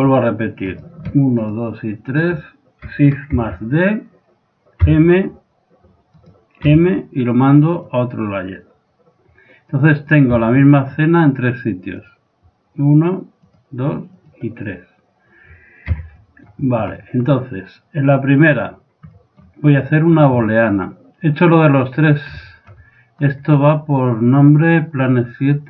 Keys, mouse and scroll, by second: 0.1-3.9 right drag, 3.4 shift+d, 6.7 m, 9.8 click, 10.3 z, 10.6-13.5 middle drag, 13.5-16.1 drag, 16.0 a, 16.3-18.5 middle drag, 18.5-20.3 drag, 19.4 middle click, 20.1 right click, 20.2-21.8 middle drag, 22.5 middle click, 23.2 right click.